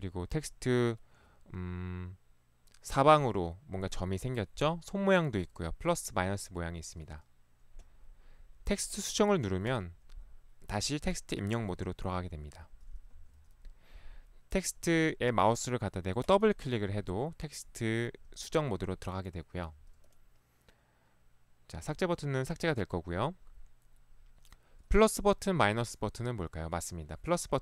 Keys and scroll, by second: 6.9 ctrl+1, 13.2 Escape, 19.6 Escape.